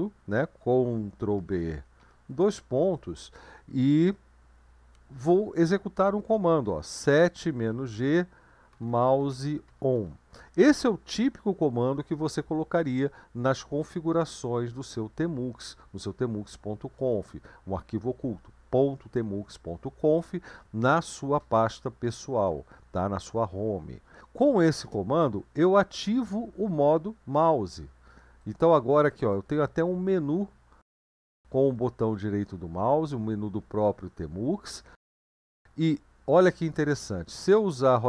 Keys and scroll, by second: 1.4 ctrl+b, 2.0 typing, 6.1-10.5 typing, 24.9 Return.